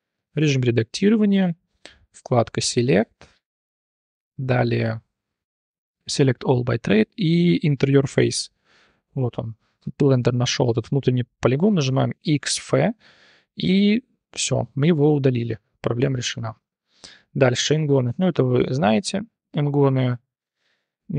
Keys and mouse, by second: 0.4 Tab, 2.6-8.1 drag, 8.6 click, 8.9 t, 9.1-10.2 drag, 11.7 click, 12.2 x, 13.1-13.5 drag, 15.5 Tab, 16.0 t, 16.7 shift+drag, 17.4-17.9 drag, 18.0 Tab, 18.4 3, 18.7 click, 18.9-19.2 drag, 19.7 click.